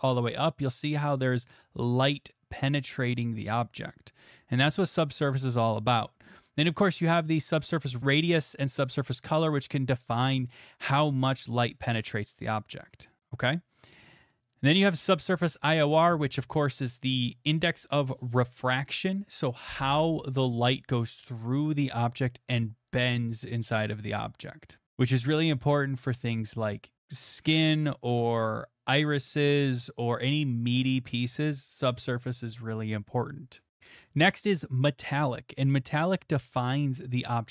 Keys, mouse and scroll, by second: 0.2-5.2 drag, 13.5 click.